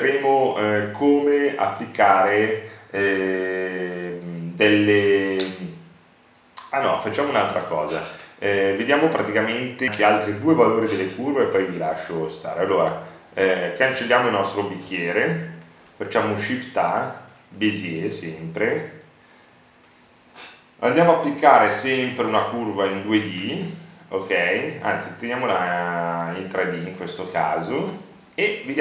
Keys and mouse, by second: 1.5 Delete, 3.9 shift+a, 15.8 Tab, 17.2 Tab, 25.1 KP_Decimal, 28.7 s.